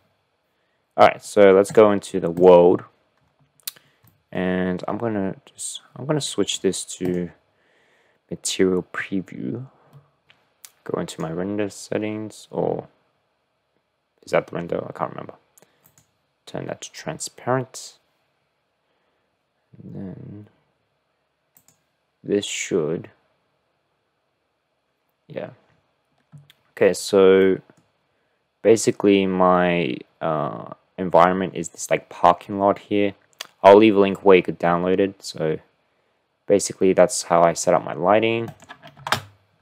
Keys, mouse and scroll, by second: 0.0 ctrl+space, 1.7-2.6 drag, 4.1 click, 9.9 click, 27.4-28.0 middle drag, 29.1-37.7 middle drag.